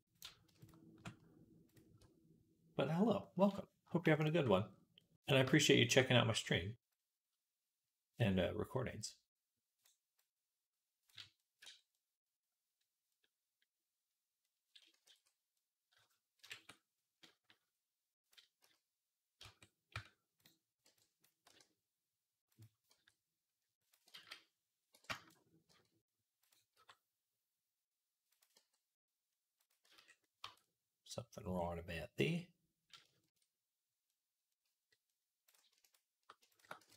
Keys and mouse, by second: 4.0 alt+shift+click, 4.0 alt+shift+middle click, 4.0 alt+shift+right click, 11.5 Tab, 14.9 ctrl+s, 16.2 KP_1, 16.4 Tab, 18.4 z, 19.3 Tab, 19.8 Tab, 20.3-28.4 right drag, 20.7 b, 21.3 r, 22.7 g, 24.0 ctrl+z, 24.8 b, 25.5 g, 26.6 r, 28.4-30.6 drag, 28.4 g, 29.7 z, 30.3 Tab, 30.6-36.9 right drag, 31.3 Tab, 35.3-36.4 drag, 36.6 s.